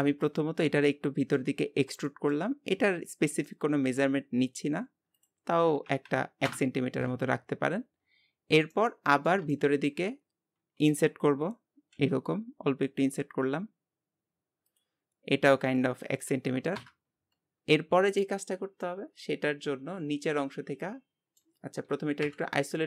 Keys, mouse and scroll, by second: 0.9 middle click, 1.7-2.1 scroll up 1, 2.1 shift+middle click, 2.6-3.1 scroll up 5, 3.5-5.2 shift+middle drag, 5.2-8.2 drag, 8.3 scroll down 1, 8.8-10.7 middle drag, 10.7-12.0 scroll up 1, 15.7-17.8 drag, 17.8-18.2 scroll down 2, 18.8-21.5 middle drag, 21.5 Tab, 22.2 KP_Divide.